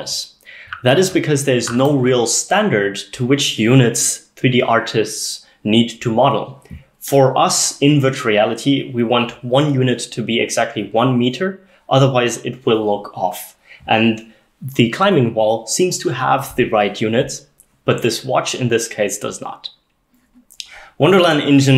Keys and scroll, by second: 0.7-1.1 s, 1.1-1.7 d.